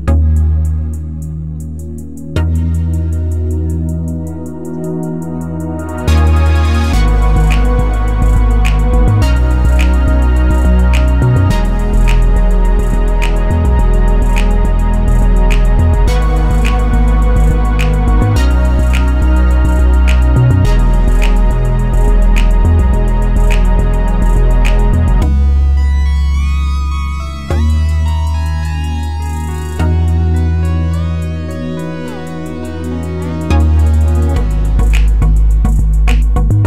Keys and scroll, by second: 29.1 5, 29.7 Return, 34.8 5, 35.1 Return.